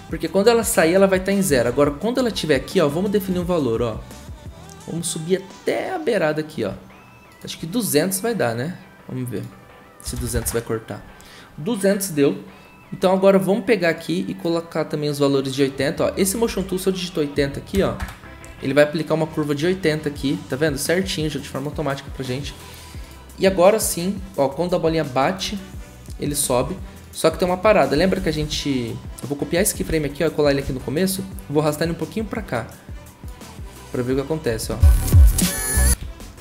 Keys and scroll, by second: 9.8-10.8 typing, 13.4-14.2 typing, 16.5 ctrl+a, 17.4-17.7 typing, 18.0 Return, 21.3 typing, 23.3 typing, 27.9 ctrl+c, 28.2 ctrl+c, 28.4 ctrl+c, 30.6 ctrl+v, 36.0 ctrl+z.